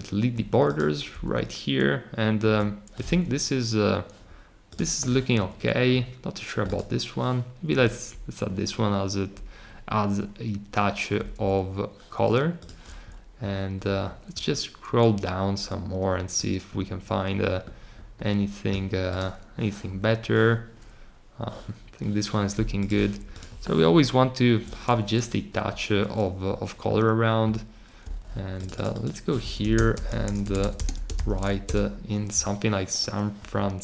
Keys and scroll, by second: 29.1-31.5 typing.